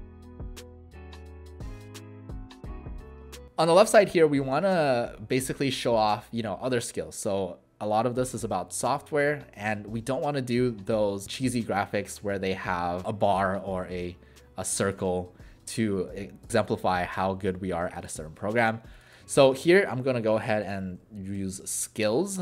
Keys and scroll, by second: 15.1 alt+shift+w, 19.5 ctrl+a, 20.6-22.4 typing.